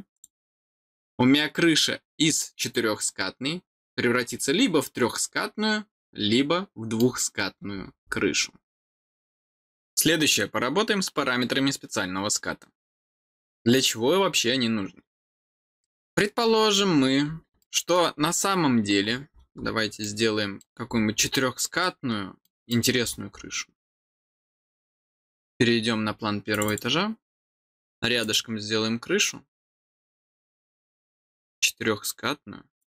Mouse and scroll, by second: 0.1 click, 2.2-2.6 scroll down 4, 3.8 scroll down 2, 4.3-6.9 middle drag, 7.5-8.3 scroll down 6, 15.8 middle click, 16.4-16.8 scroll down 4, 17.5 middle click, 18.1 scroll down 2, 19.0-19.4 scroll down 4, 20.0 middle click, 20.6-21.2 scroll down 6, 21.8 middle click, 22.6 middle click, 23.7 scroll down 1, 24.4 scroll up 1, 26.5 click, 28.2 click, 32.7 click.